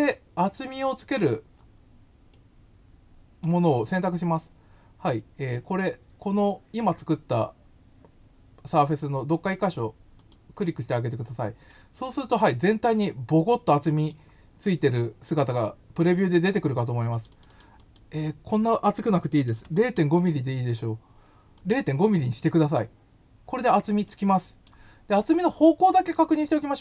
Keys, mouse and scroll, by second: 1.5 scroll, 2.3-3.4 middle drag, 10.2 click, 11.7-14.0 middle drag, 17.1 click, 17.3 click, 17.4 click, 17.7 click, 21.5 click, 24.0 middle click.